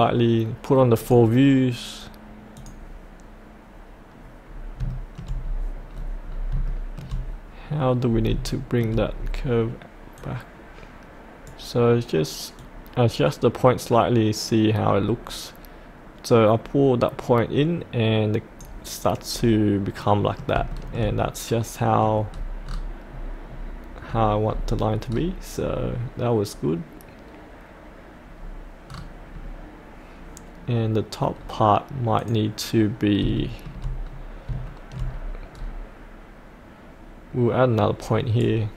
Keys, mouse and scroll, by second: 1.0 click, 3.9-4.8 scroll up 1, 4.9 shift+middle click, 5.4 scroll up 1, 6.7 shift+middle click, 8.0 scroll up 1, 8.5 shift+middle click, 9.1-10.2 scroll down 1, 10.2-18.8 drag, 19.3-20.0 scroll up 1, 20.0 middle click, 20.7 shift+middle click, 22.2-24.0 scroll down 1, 32.2 click, 33.3 shift+middle click, 34.1-34.5 scroll down 1, 34.6 shift+middle click, 35.0 scroll up 1, 38.4 right click.